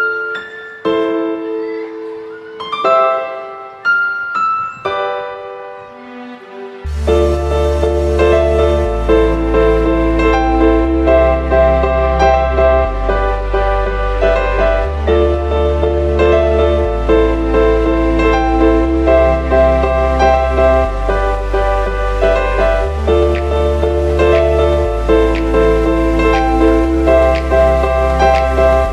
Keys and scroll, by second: 2.4 ctrl+z, 4.2-7.0 typing, 8.8 ctrl+-, 9.2 ctrl+space, 10.6 ctrl+-, 10.9 ctrl+space, 11.7-15.2 typing, 15.0 ctrl+-, 17.8 ctrl+space, 18.3 space, 18.8 space, 19.7 space, 21.3 space, 22.5 space, 23.4 ctrl+-, 24.3 ctrl+-, 27.8 F9, 28.0 space.